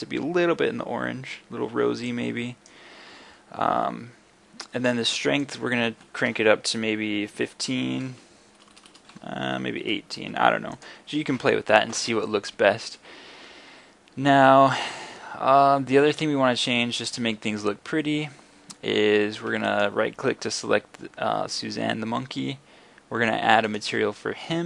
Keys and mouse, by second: 5.5-8.8 middle drag, 8.8 BackSpace, 8.9 BackSpace, 13.1 middle click, 13.7 middle click.